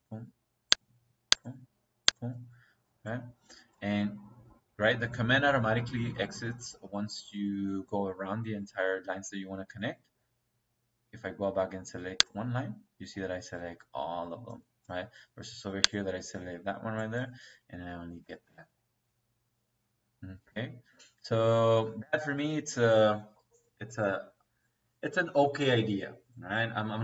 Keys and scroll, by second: 17.7 Escape.